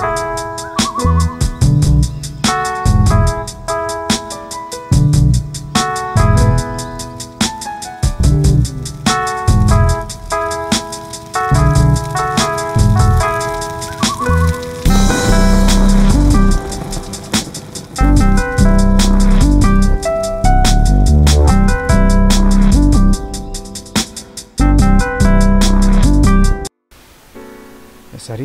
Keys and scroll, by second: 1.3 ctrl+a, 1.7 ctrl+c, 1.8 ctrl+v, 3.4 ctrl+a, 13.3 ctrl+a.